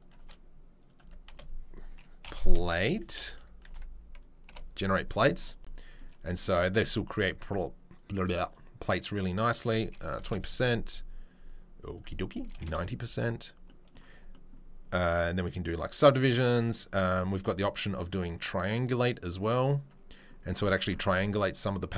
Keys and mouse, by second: 0.8 space, 1.0 Tab, 7.9-21.9 right drag.